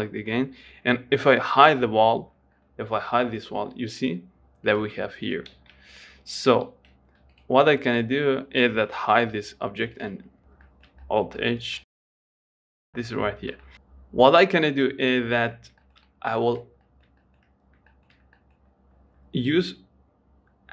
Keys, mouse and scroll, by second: 2.6-3.4 scroll down 11, 3.4 h, 3.7-5.0 scroll up 9, 5.0 click, 5.9 ctrl+z, 6.8 ctrl+z, 7.6 click, 8.2 click, 9.6 h, 10.2 click, 10.5 scroll up 1, 10.8 shift+middle click, 11.3 scroll up 3, 11.5 shift+middle click, 11.7 scroll down 4, 11.9 shift+middle click, 12.2-15.8 shift+middle drag, 15.8 scroll up 1, 16.1 shift+middle click, 16.4-16.7 scroll down 3, 16.7-18.0 shift+middle drag, 18.0 scroll up 1, 18.2-20.7 shift+middle drag.